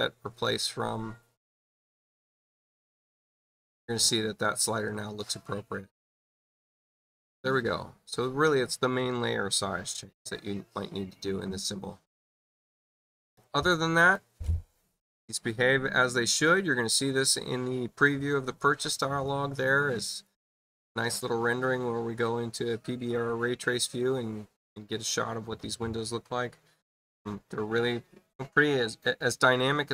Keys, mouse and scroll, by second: 0.4 click, 3.9 space, 20.2 click.